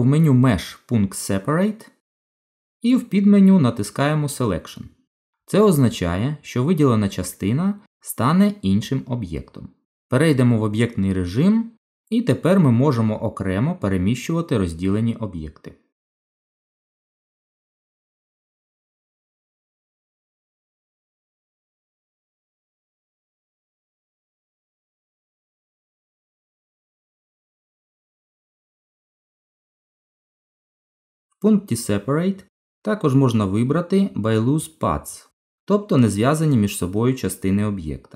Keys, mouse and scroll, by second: 1.3 click, 10.2 Tab, 13.0 click, 15.0 g, 18.0 middle click, 20.8 click, 24.4 click, 27.3 Tab, 29.7 right click, 35.6 middle click.